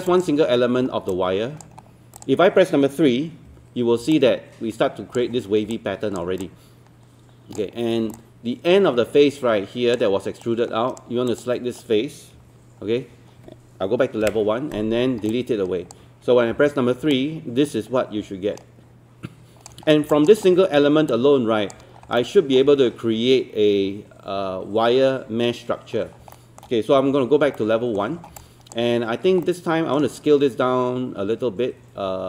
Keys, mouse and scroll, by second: 0.1 alt+click, 0.7 scroll down 1, 1.1 alt+click, 1.8-2.2 scroll up 1, 2.2 click, 3.5 3, 4.1 alt+click, 5.7 alt+click, 6.4 alt+click, 8.2-10.0 alt+drag, 10.4 right click, 11.3 click, 12.4 1, 14.2 Delete, 15.1 scroll down 1, 15.3 alt+click, 16.5 alt+3, 17.1-19.7 alt+drag, 20.1 alt+click, 20.4 scroll up 1, 20.6 scroll down 1, 21.1 alt+click, 22.0 scroll down 1, 22.2 alt+middle click, 25.8-26.2 scroll up 1, 26.4 alt+middle click, 27.3 scroll up 1, 27.6 alt+middle click, 28.2 scroll down 1, 28.4 alt+click, 28.9-29.3 scroll up 1, 29.4 alt+middle click.